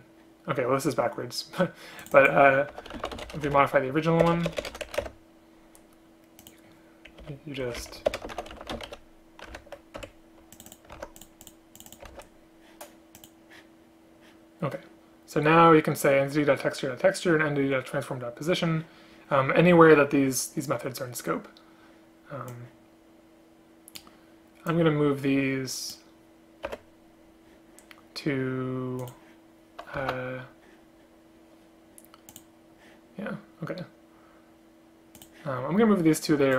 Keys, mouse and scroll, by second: 4.4 BackSpace, 4.5 BackSpace, 4.6 BackSpace, 7.7 Up, 7.9 Right, 8.2 ctrl+BackSpace, 10.1 Escape, 11.1 ctrl+c, 12.2 ctrl+v, 26.8 F6, 30.2 alt+r.